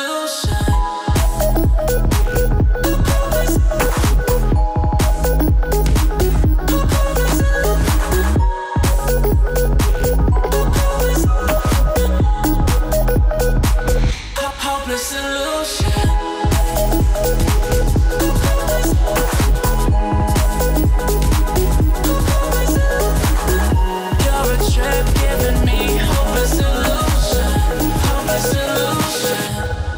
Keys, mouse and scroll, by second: 0.0-0.8 alt+scroll up 2, 1.2-1.8 shift+click, 2.4-3.6 drag, 3.8-5.3 alt+scroll up 2, 5.3-6.7 right drag, 6.7-8.8 drag, 11.3-14.4 drag, 15.8 alt+scroll down 1, 16.3 click, 19.0-21.6 drag, 20.1-21.0 drag, 23.9 click, 26.2-26.8 alt+scroll down 2, 26.8 click, 27.1-28.0 alt+scroll up 2, 28.2-28.9 click, 29.0 alt+scroll down 1, 29.6 click.